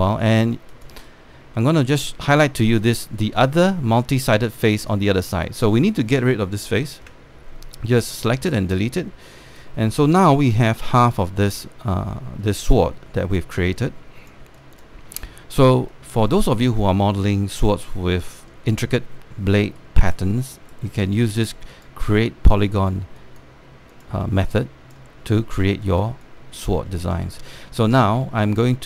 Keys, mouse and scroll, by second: 0.7 scroll up 1, 0.9 alt+click, 1.8 right click, 2.9 click, 4.1 alt+click, 5.2 click, 6.0 alt+click, 7.7 Delete, 9.4 alt+click, 10.5-14.1 alt+drag, 10.5 scroll down 1, 14.3 alt+click, 15.2 alt+click, 15.9 click, 15.9 space, 17.1 scroll down 1, 17.5 alt+middle click, 17.7-18.4 scroll up 1, 18.5 alt+middle click, 20.5 right click, 21.8-24.6 drag, 27.5 alt+middle click, 28.1 alt+middle click, 28.4 alt+middle click, 28.8 scroll up 1.